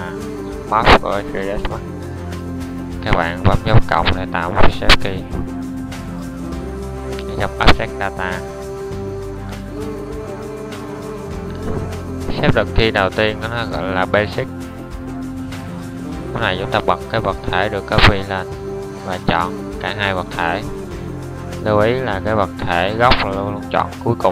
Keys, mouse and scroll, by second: 2.9-7.4 middle drag, 13.5-17.4 middle drag, 18.3-19.1 drag.